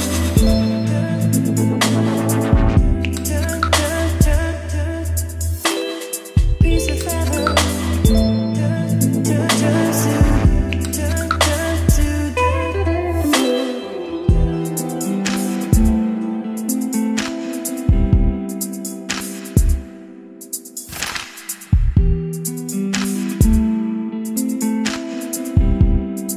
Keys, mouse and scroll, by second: 0.0-0.8 typing, 5.6 ctrl+s, 10.1 click, 10.7-12.2 right drag, 12.2-21.5 drag, 22.1-24.7 typing, 25.7-26.3 drag.